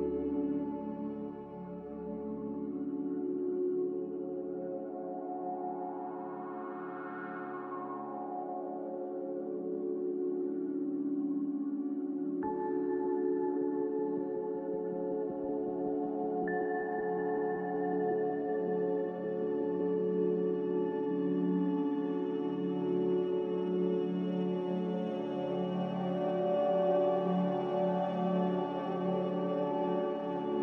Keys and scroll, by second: 3.2 x, 4.5 z, 6.4-7.1 typing, 7.7 Return, 9.4-10.2 typing, 12.2 a, 14.1 m, 15.1 Escape, 18.0-18.8 typing.